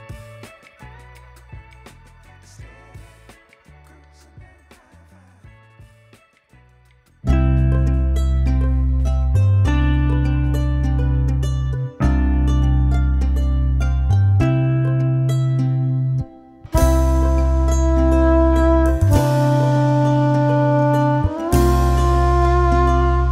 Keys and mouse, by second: 0.0-1.6 typing, 0.4 click, 2.1 click, 4.0 z, 4.5 click, 10.8 click, 11.0 ctrl+shift+click, 13.5 ctrl+alt+shift+e, 14.5 z, 14.8 click, 15.6-19.5 typing, 18.1 click, 20.9 click.